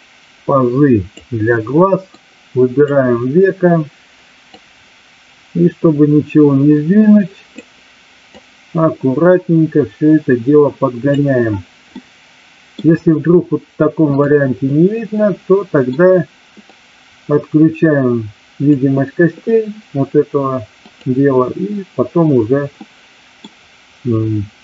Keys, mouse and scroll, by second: 2.2-2.9 drag, 4.6-7.6 drag, 8.2-11.2 drag, 11.8-12.7 middle drag, 14.1 click, 14.7-15.9 middle drag, 16.7-18.7 drag, 20.8 click, 22.8 middle click.